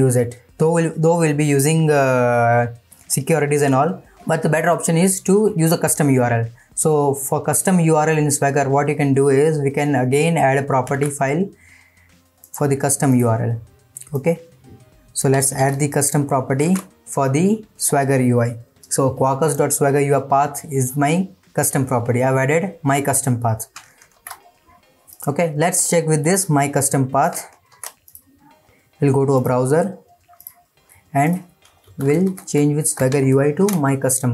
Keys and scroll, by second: 16.6 ctrl+v, 24.1 ctrl+s, 27.7 ctrl+c.